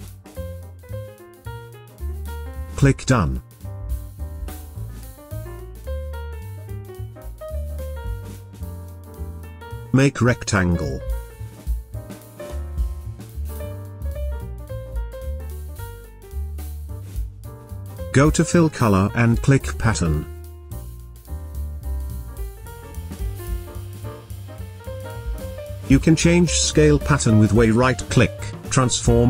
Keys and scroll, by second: 6.3 space, 24.6 v.